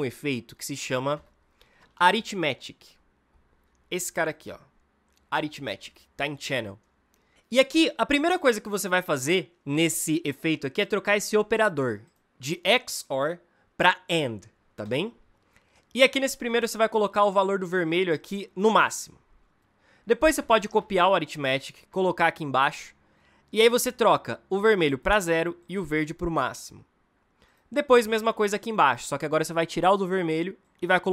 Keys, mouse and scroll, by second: 1.0 Return, 1.4-2.5 typing, 20.5 ctrl+c, 21.9 ctrl+v, 24.4-27.4 drag, 27.9 ctrl+v.